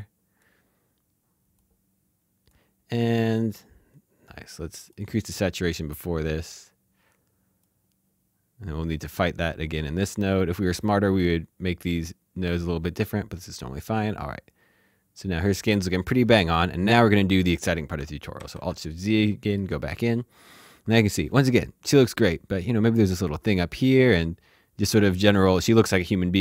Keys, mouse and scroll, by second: 4.8 click, 7.6 click, 12.0 click, 17.9 click, 18.4 alt+shift+z, 19.0 middle click, 25.1 click.